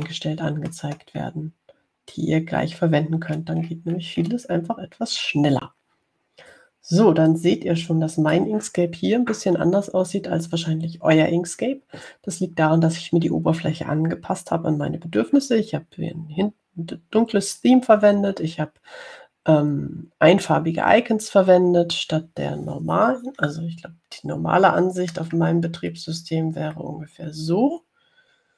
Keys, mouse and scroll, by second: 1.3 middle click, 1.6 click, 1.8 click, 3.8 scroll down 2, 4.6-6.6 scroll down 4, 8.5-10.0 drag, 26.6 ctrl+scroll up 2, 27.1-27.9 ctrl+scroll up 4.